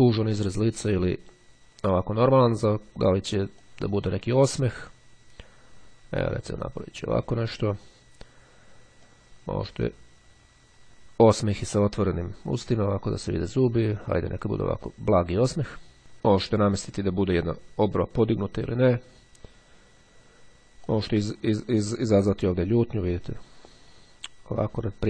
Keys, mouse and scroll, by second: 3.7-7.9 drag, 9.2-19.3 drag, 21.0-25.0 drag.